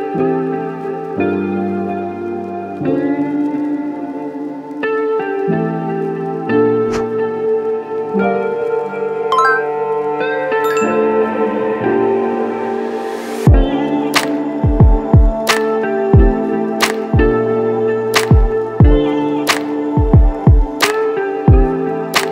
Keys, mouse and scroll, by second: 0.6 shift+click, 2.1 shift+click, 3.0 shift+click, 4.3 shift+click, 5.2 shift+click, 6.0 shift+click, 6.6 shift+click, 7.4 shift+click, 8.2 shift+click, 9.4 shift+click, 10.3 shift+click, 11.4 shift+click, 11.9 shift+click, 12.6 shift+click, 13.2 shift+click.